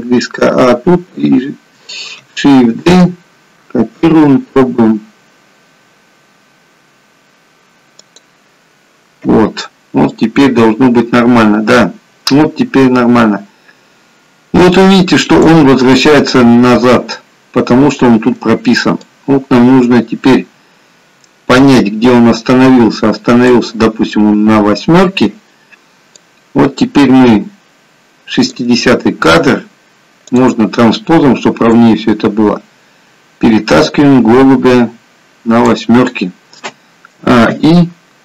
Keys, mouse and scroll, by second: 3.0 shift+d, 10.4 click, 15.9-16.8 scroll up 2, 16.8-17.4 scroll down 1, 19.2 click, 26.5 click, 30.3 click, 31.8 click, 37.3 a, 37.5 i.